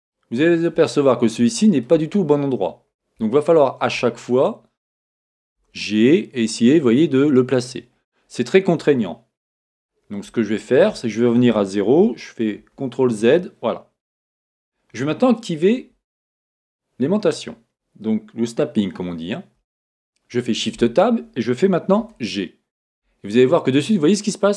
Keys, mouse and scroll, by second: 0.1-2.2 shift+middle drag, 0.9-1.5 scroll up 3, 2.1 scroll up 2, 3.0 middle click, 3.4-5.6 shift+middle drag, 4.1 scroll up 1, 5.6 g, 6.4-8.8 middle drag, 7.7 click, 8.2 scroll down 1, 8.9-12.0 middle drag, 10.4-11.0 scroll down 2, 12.6 z, 14.2 shift+middle click, 19.6 shift+Tab, 22.0 g.